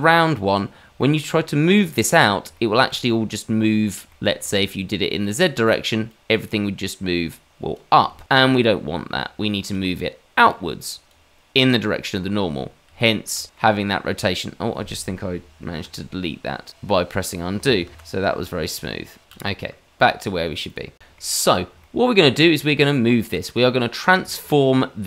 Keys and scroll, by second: 8.1 ctrl+z, 16.6 ctrl+z, 17.1 ctrl+z, 17.7 shift+a.